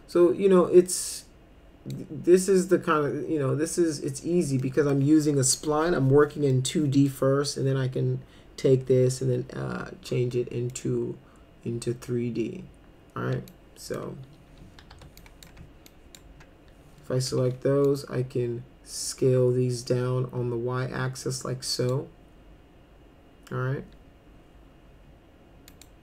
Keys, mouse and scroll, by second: 1.1 click, 4.6 middle click, 6.5 middle click, 10.3 middle click, 13.5 ctrl+click, 14.9 2, 15.2 click, 15.9 ctrl+click, 17.3 r, 17.9-21.9 drag, 25.7 click.